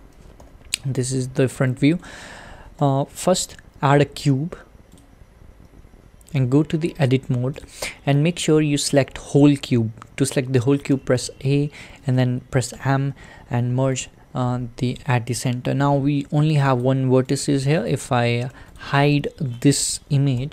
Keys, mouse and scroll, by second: 1.7-2.8 middle drag, 5.0 shift+a, 6.4 Tab, 7.6 click, 11.0 a, 14.0 m, 15.4-15.8 scroll up 3, 15.9-16.8 middle drag, 16.8 click, 17.5 click, 17.9 click, 18.5 Tab, 18.8 click, 20.4 h.